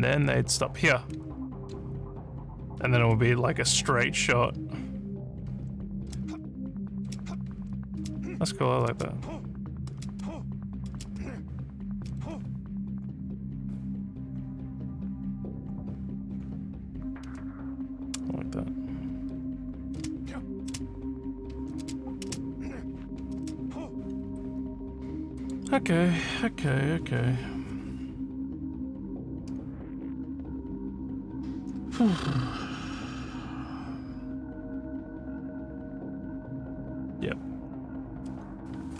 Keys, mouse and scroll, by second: 1.0 a, 1.6 d, 2.8-4.4 typing, 5.4 w, 5.9 space, 6.9 space, 7.5 w, 8.0 space, 9.9 space, 10.9 space, 11.9 space, 15.5-17.3 typing, 19.1-23.7 typing, 25.4 click.